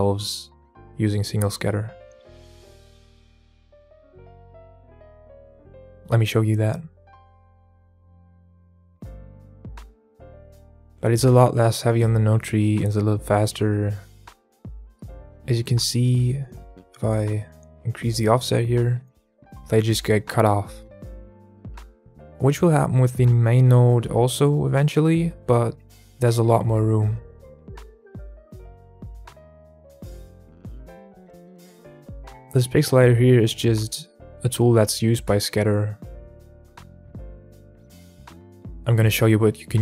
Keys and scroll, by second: 23.2 KP_0, 23.3 KP_Enter, 26.9 KP_Enter, 26.9 KP_0, 32.2 KP_Enter, 32.2 KP_0, 37.9 alt+a, 37.9 KP_Enter.